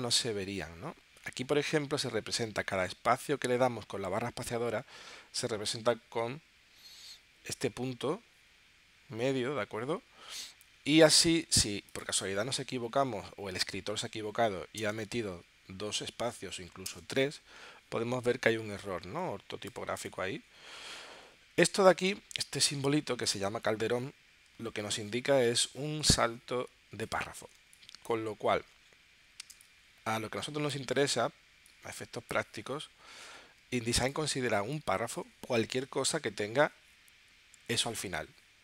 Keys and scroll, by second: 27.7 space, 29.5 space, 33.6 space, 34.5 space.